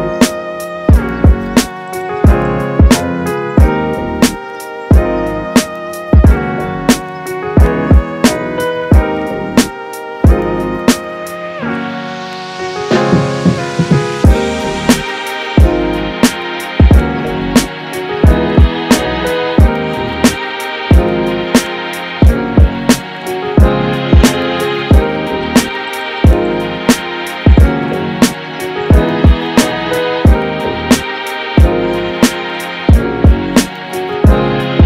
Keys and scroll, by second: 9.0 space, 26.3 super+z.